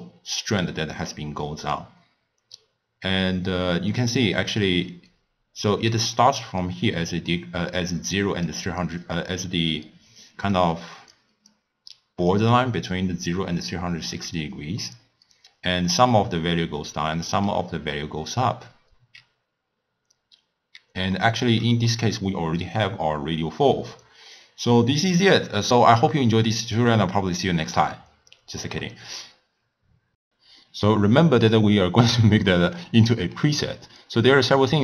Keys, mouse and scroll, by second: 4.4 d, 4.6-5.7 right drag, 5.7 d, 5.9 d, 6.4-8.2 drag, 8.2-14.8 typing, 8.5-9.1 drag, 9.5 click, 10.6 click, 11.6-12.3 drag, 14.9-20.2 middle drag, 20.8 d, 21.2 middle click, 21.5 d, 21.6 d, 21.9-25.1 middle drag, 34.3-34.8 middle drag.